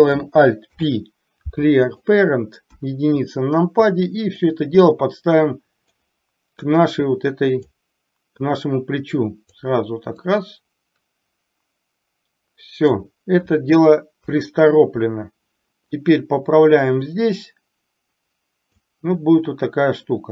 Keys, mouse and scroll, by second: 0.7 alt+p, 2.8 KP_1, 4.6-6.1 drag, 6.7-7.7 drag, 8.6-9.7 drag, 10.2-12.9 drag, 14.3 KP_3, 16.1-18.8 drag.